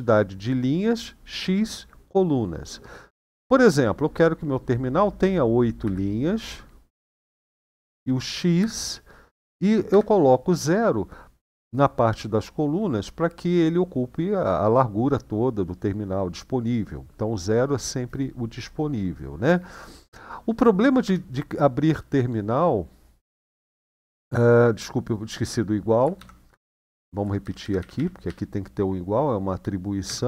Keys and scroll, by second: 5.7 8, 8.3 typing, 9.7 typing, 20.8 Return, 25.9 shift+;, 26.4 Up, 27.2 Left, 27.3 Left, 27.5 Left, 27.7 Left, 28.0 Delete, 29.8 =.